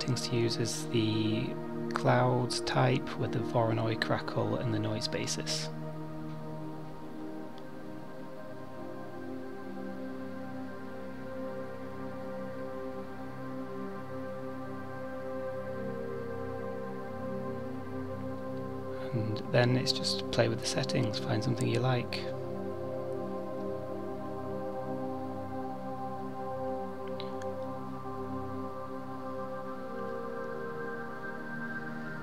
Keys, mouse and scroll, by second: 0.9 middle click, 4.7 middle click, 5.6 click, 6.6 click, 7.9 middle click, 14.3 click, 20.5-21.9 scroll down 1, 21.9 click, 23.9 click, 27.4 click, 28.8 middle click, 30.7 middle click, 31.2 scroll down 2, 31.7 middle click.